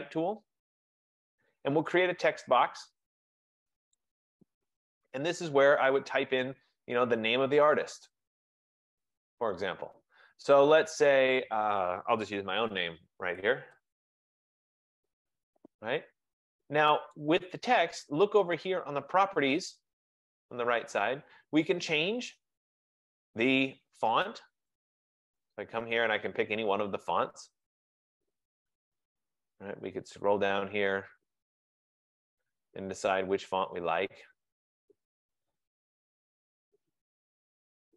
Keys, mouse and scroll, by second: 0.3 click, 4.1 click, 12.6 click, 12.6-15.1 typing, 17.3 click, 23.7 F15, 24.9 click, 28.7-31.5 scroll, 35.9-36.6 scroll, 37.0-37.5 scroll.